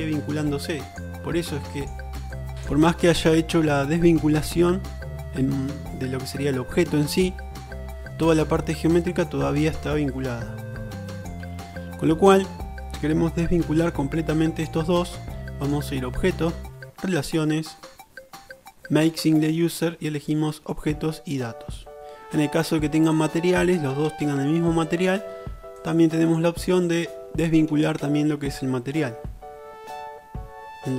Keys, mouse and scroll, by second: 13.7 Tab, 14.7-15.9 drag, 26.0 click.